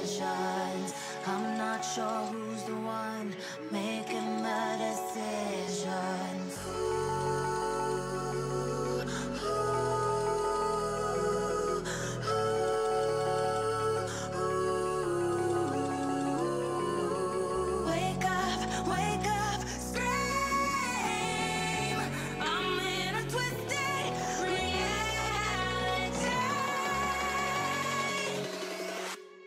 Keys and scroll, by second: 0.6 shift+o, 1.6-3.0 typing.